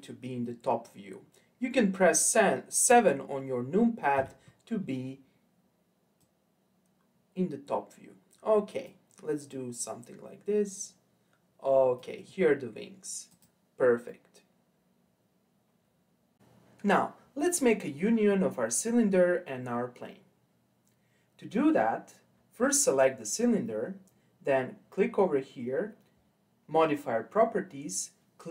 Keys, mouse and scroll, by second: 4.1 KP_7, 6.2 click, 9.5 click, 13.3 click, 14.1-16.4 middle drag, 18.3-21.3 middle drag, 22.7 click, 26.8 click.